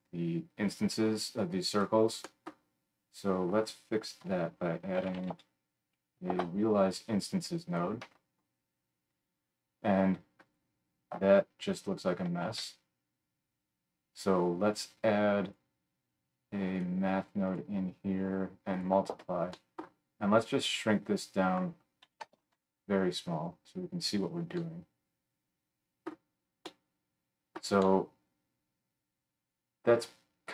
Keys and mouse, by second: 4.2 F3, 7.8-10.4 middle drag, 10.4 click, 10.6-17.4 middle drag, 12.4 shift+a, 17.4-30.5 drag.